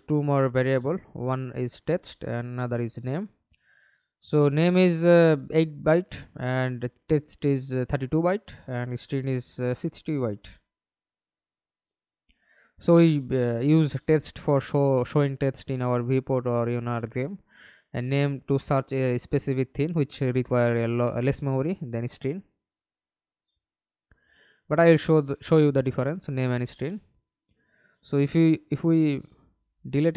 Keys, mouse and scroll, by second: 0.0-1.2 typing, 2.3-3.9 typing, 10.1 double click, 12.1 double click, 22.3 right click, 26.5 alt+click.